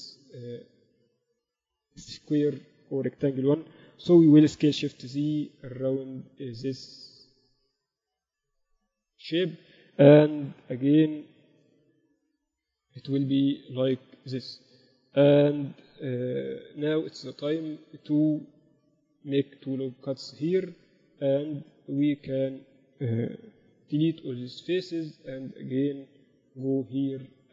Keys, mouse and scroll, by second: 0.9 a, 1.2 a, 2.1 b, 4.6 s, 9.9 a, 10.7 b, 12.0 s, 13.7 a, 15.4 KP_8, 15.8 KP_6, 16.2 KP_6, 18.9 ctrl+r, 20.5 z, 21.7-23.6 drag, 22.5-24.8 right drag, 23.9 x.